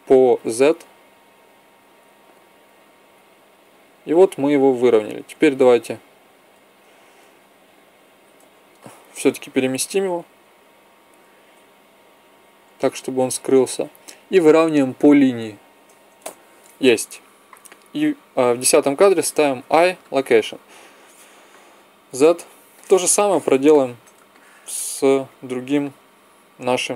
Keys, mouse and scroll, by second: 10.0 g, 19.5 i, 21.9 z, 22.7 middle click, 23.0-24.1 middle drag.